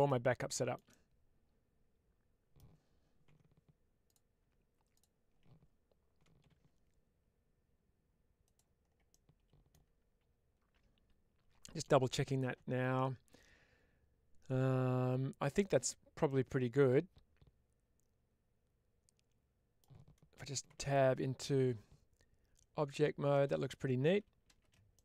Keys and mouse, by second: 3.2 2, 3.9 click, 6.3 g, 8.3 click, 9.0 middle click, 16.1-19.6 middle drag, 23.2-23.9 middle drag, 24.4 shift+space, 24.8-25.0 middle drag.